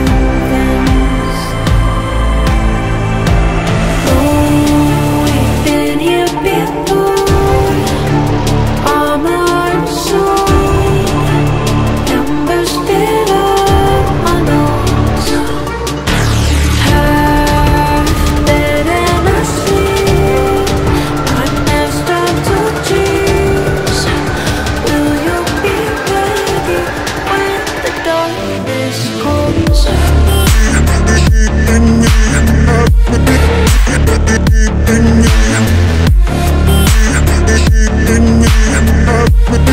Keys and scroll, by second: 6.2 space, 8.2 space, 27.6 F3.